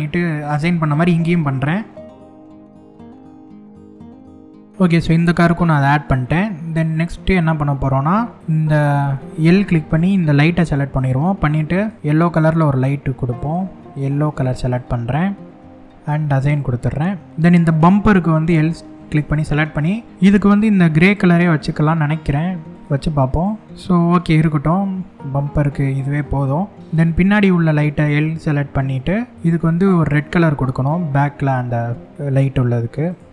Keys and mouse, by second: 1.2 shift+middle click, 2.2 shift+click, 2.6 shift+middle click, 2.7 middle click, 2.9 shift+click, 3.1 shift+click, 3.3 shift+click, 3.8 shift+click, 4.1 click, 4.3 ctrl+KP_Add, 5.7 middle click, 7.2-8.4 middle drag, 11.5 click, 12.9 click, 16.0 click, 20.6 click, 22.3 click, 23.4-24.6 middle drag, 25.0-26.7 middle drag, 29.5 click, 33.0 click.